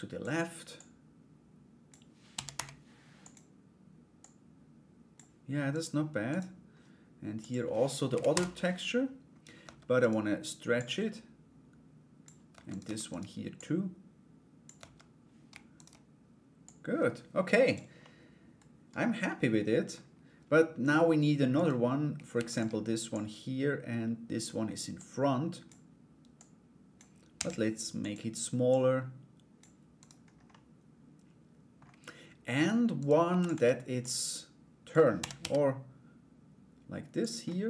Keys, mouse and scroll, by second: 3.7-4.7 drag, 5.3 right click, 5.9 right click, 7.0 click, 9.2 Tab, 9.6 right click, 10.3-11.8 drag, 12.3 right click, 12.7 Tab, 12.7 right click, 13.1-14.2 drag, 15.3 right click, 16.2-17.3 drag, 17.6-19.5 middle drag, 21.1 right click, 21.9 shift+d, 22.8-25.2 drag, 25.9 click, 28.3-29.6 drag, 29.6 right click, 30.1-31.3 middle drag, 32.6 right click, 32.9 shift+d, 33.6 click, 34.7 r, 37.0 middle click.